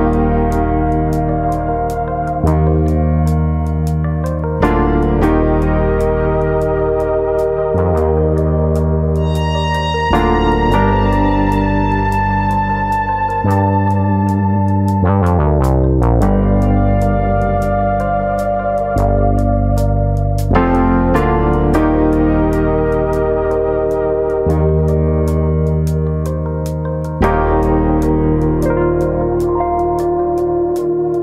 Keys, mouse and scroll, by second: 0.7 click, 1.4 ctrl+KP_Subtract, 2.6 click, 4.4 ctrl+KP_Subtract, 5.4 click, 6.6 scroll down 2, 6.9 scroll up 1, 6.9 middle click, 7.3 Tab, 7.6 middle click, 8.0 middle click, 8.3 scroll up 1, 8.6 middle click, 10.1 KP_Divide, 10.5-10.9 scroll down 8, 11.0 shift+middle click, 11.4 middle click, 12.2 shift+middle click, 12.4 middle click, 12.7-13.2 scroll down 3, 13.0 shift+middle click, 13.2 middle click, 13.9 middle click, 14.3 Tab, 14.3 shift+middle click, 14.7 middle click, 15.0 a, 15.4 s, 16.4 click, 16.5 middle click, 16.8-17.2 scroll up 3, 17.0 shift+middle click, 17.3 middle click, 17.6 s, 19.3 click, 19.4 middle click, 19.8-20.2 scroll up 2, 20.1 middle click, 21.1 click, 22.3-23.5 scroll down 5, 22.6 middle click, 23.1 middle click, 23.5 middle click, 30.6-31.2 scroll up 6.